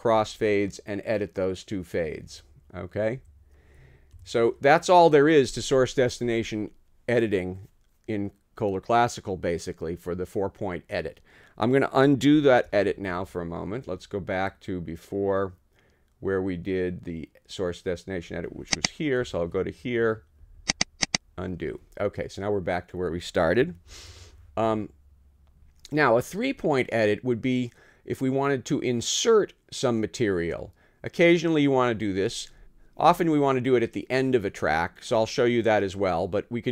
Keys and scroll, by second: 2.2 Right, 3.2 Left, 4.1 ↺, 19.2 Down.